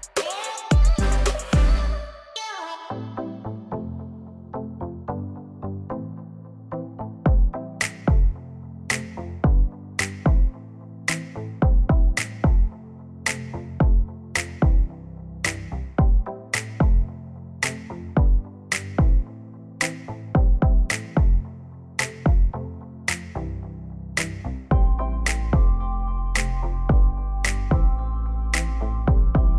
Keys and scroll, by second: 11.9 ctrl+z, 13.0 ctrl+z.